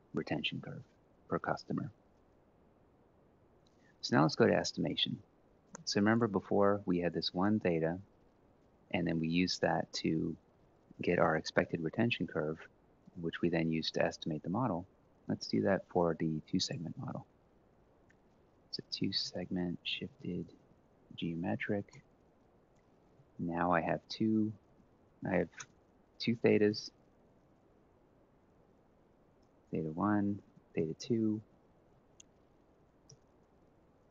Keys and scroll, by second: 17.8-21.9 typing, 22.9 Right, 23.5 Right, 24.2-24.9 typing, 25.3 Return, 26.1-34.1 typing.